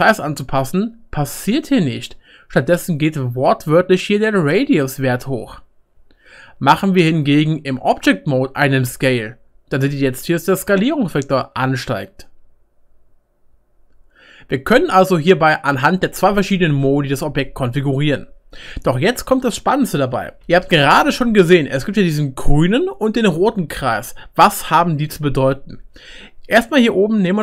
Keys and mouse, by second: 0.2 middle click, 4.8-6.7 middle drag, 7.1 Tab, 8.9 s, 9.8-14.5 middle drag, 10.2 right click, 10.9 right click, 11.9 right click, 12.3 right click, 12.7-27.4 right drag, 20.4 Tab.